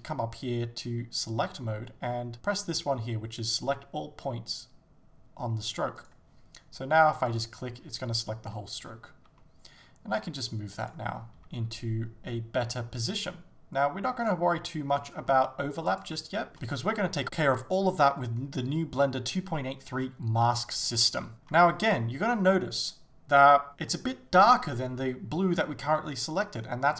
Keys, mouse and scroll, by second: 6.0-7.3 drag, 7.3 right click, 9.4 g, 11.4 click, 11.5 g, 15.2 s, 16.0 click, 16.1 g, 16.5 shift+middle click, 21.3 alt+z, 21.3-26.9 drag.